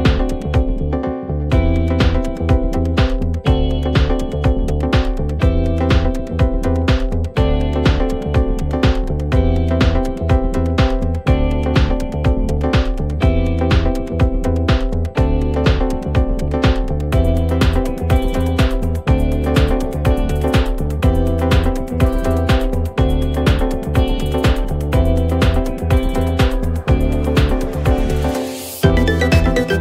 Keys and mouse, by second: 2.8 middle click, 4.8 middle click, 5.3 middle click, 5.7 middle click, 6.0 middle click, 6.9 middle click, 8.3 middle click, 8.5 middle click, 9.0 middle click, 9.6 middle click, 11.2 middle click, 12.8 middle click, 15.3 middle click, 17.7 middle click, 20.2 middle click, 21.9 middle click, 23.4 middle click, 24.2 middle click, 24.6 middle click, 25.1 middle click, 25.5 middle click, 25.8 middle click, 26.4 middle click, 27.5 middle click, 27.9 middle click, 28.4 middle click, 28.8 middle click, 29.1 middle click.